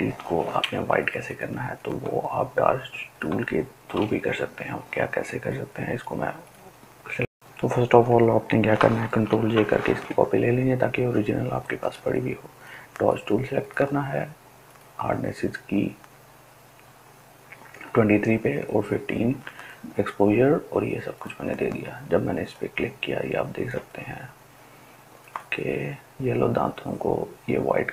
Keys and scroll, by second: 0.5 ctrl+space, 1.1 ctrl+space, 1.3 ctrl+space, 7.7 ctrl+j.